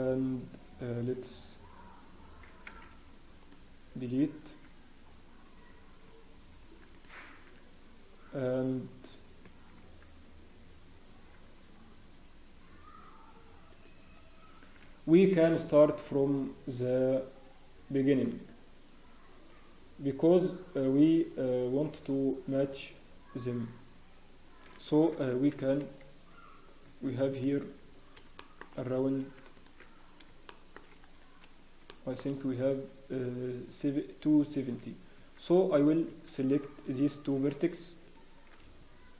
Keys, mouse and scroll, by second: 4.4 Tab, 4.4 scroll up 1, 5.0 scroll down 1, 5.4 Tab, 5.4-6.1 scroll up 2, 6.1 Tab, 6.1 scroll down 1, 6.4 scroll up 1, 6.6 Tab, 6.9 click, 7.1 Tab, 8.2 scroll down 1, 8.6 scroll up 1, 9.0-9.6 scroll down 2, 9.4 Tab, 9.4 scroll up 1, 9.8 Tab, 10.4 scroll up 1, 11.1 Tab, 11.1 scroll down 1, 13.7 click, 14.5 scroll down 1, 20.3 scroll, 22.6 scroll up 1, 23.0 scroll down 1, 24.6 click, 24.6 scroll down 1, 25.6 Tab, 25.6 scroll down 1, 25.9 scroll up 3, 26.8 Tab, 27.3 click, 27.6 Tab, 27.6-27.9 scroll up 2, 28.4 shift+middle click, 29.5 alt+click, 29.5 scroll up 1, 29.9 scroll down 1, 30.4 shift+middle click, 30.9 scroll up 1, 31.9 shift+middle click, 31.9-32.2 scroll down 3, 34.6 scroll down 1, 35.2 Tab, 35.7 click, 36.1 Tab, 36.1-37.0 scroll down 2, 37.0 click, 38.0 shift+middle click.